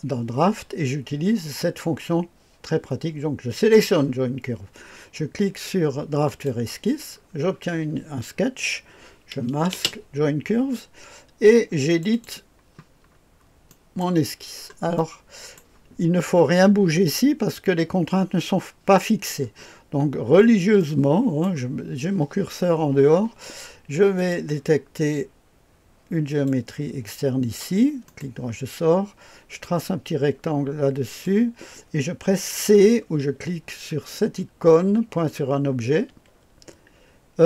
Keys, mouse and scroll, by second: 3.5 click, 6.2 click, 7.1 scroll down 1, 9.7 space, 11.9 click, 13.1-14.0 scroll up 1, 13.7-14.0 right drag, 14.3-14.9 scroll up 1, 19.3-20.2 scroll up 1, 20.2-21.2 scroll up 1, 20.8 right click, 24.1 click, 26.3 click, 28.0 right click, 29.6-31.3 drag, 36.1 c.